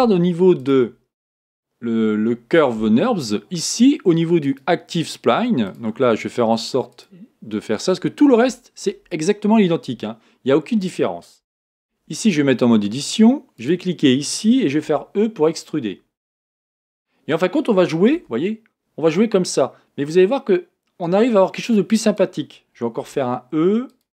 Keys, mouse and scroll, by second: 0.5 click, 4.4 click, 5.7 click, 6.9-7.9 drag, 11.9 Tab, 13.6 click, 14.9 e, 18.2 g, 23.0 e.